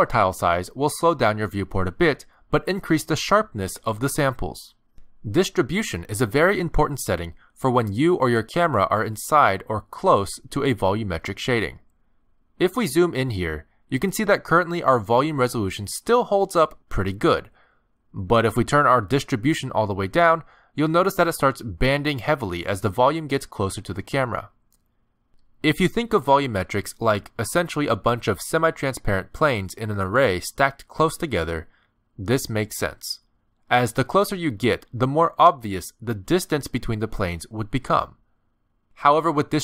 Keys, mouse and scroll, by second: 1.5 middle click, 7.4 click, 10.2-10.6 scroll up 3, 10.6 middle click, 11.2 shift+middle click, 12.2-13.1 scroll up 6, 13.6 middle click, 14.1 shift+middle click, 15.0 middle click, 19.7 click, 27.0-27.8 scroll down 6, 28.2 middle click, 28.5-28.8 scroll down 2, 28.8 middle click, 29.9 middle click, 31.1 scroll up 1, 32.6-33.8 scroll up 7, 34.2 shift+middle click, 35.1 middle click.